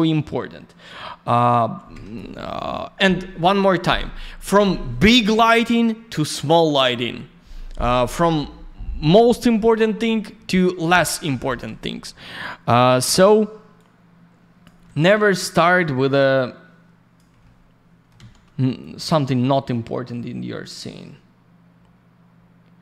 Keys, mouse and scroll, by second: 1.2 click, 12.2 click, 12.4 click, 13.1 click, 13.2 click, 13.7 click, 16.0 click, 17.4 alt+middle click, 18.8 click.